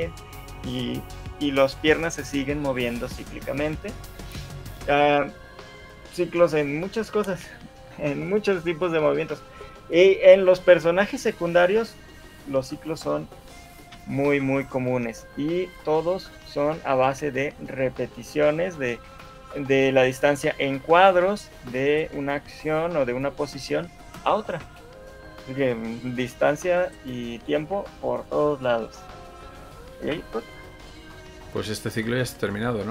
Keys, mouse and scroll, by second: 14.1 Escape, 15.9 right click, 17.9 right click, 19.9 right click, 25.1 right click, 30.3 alt+a, 31.7 middle click, 32.7 middle click.